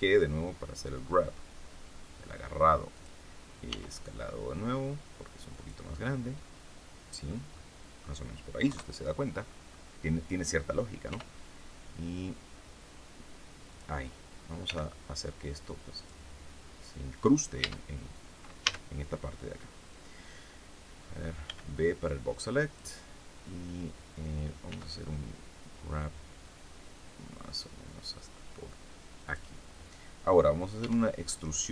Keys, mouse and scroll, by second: 2.9 click, 3.6 s, 5.4 click, 5.9-6.3 scroll down 1, 6.3-7.4 middle drag, 7.4 middle click, 8.6 KP_3, 9.4-9.8 scroll up 4, 11.0 r, 13.6 click, 14.6 g, 15.9 click, 17.5 Tab, 18.6 a, 21.4 b, 21.7-22.8 drag, 24.6 g, 29.2 click, 30.7 e.